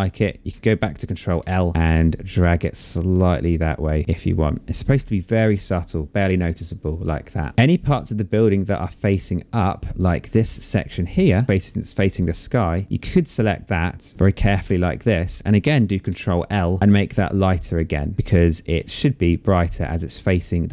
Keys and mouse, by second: 0.4 ctrl+l, 1.8 click, 4.0 click, 4.5 ctrl+d, 7.5 click, 10.0 click, 12.4 click, 13.4 click, 15.2 ctrl+l, 16.8 click, 20.3 click.